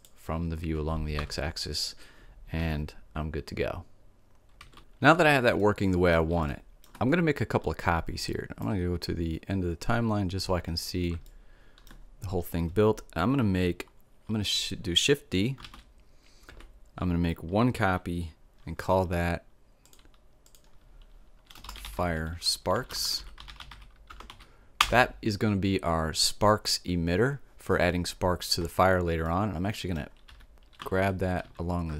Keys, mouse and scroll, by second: 1.1 Tab, 2.6 alt+a, 4.7 alt+a, 5.5-8.3 middle drag, 8.5-11.2 right drag, 11.2-13.0 middle drag, 15.6 shift+d, 19.8-22.4 drag, 29.2-31.0 middle drag, 30.2 g.